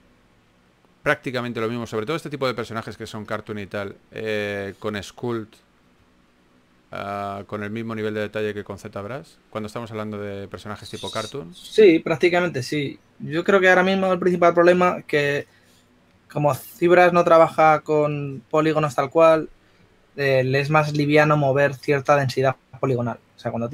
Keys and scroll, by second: 4.9 shift+f, 7.2 2.